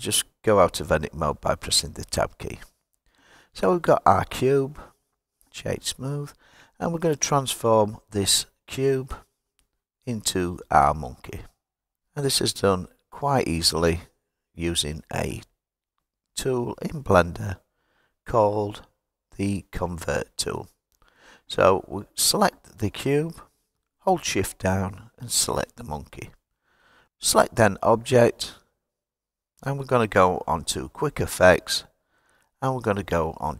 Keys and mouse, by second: 2.4 Tab, 4.9-6.0 right drag, 14.7 click, 15.8 click, 16.7 click, 17.9 click, 19.1-21.5 drag, 22.7 click, 24.9 shift+click, 26.5-27.1 right drag, 27.3-28.0 drag, 29.5-33.5 drag.